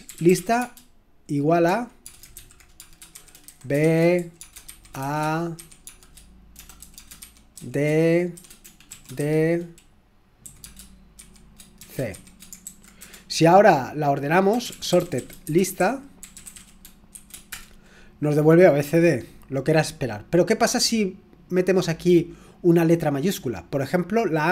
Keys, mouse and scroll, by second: 0.0-9.2 typing, 10.4-13.0 typing, 14.4-17.5 typing.